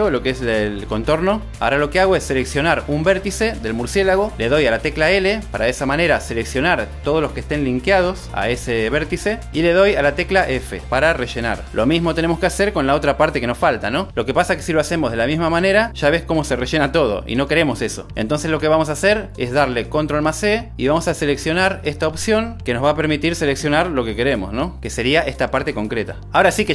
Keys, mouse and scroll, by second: 4.5 click, 5.7 l, 11.0 f, 12.4 Tab, 14.2 l, 16.3 f, 18.3 super+z, 18.7 super+z, 20.8 ctrl+e.